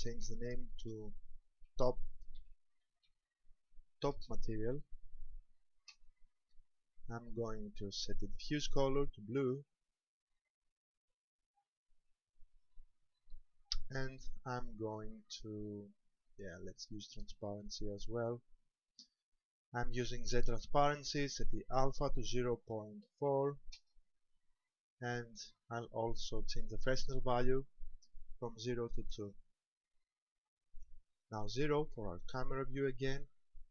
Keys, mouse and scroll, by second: 8.6 click, 14.6 click, 18.0 click, 21.4 click, 27.7 click, 32.0 KP_0.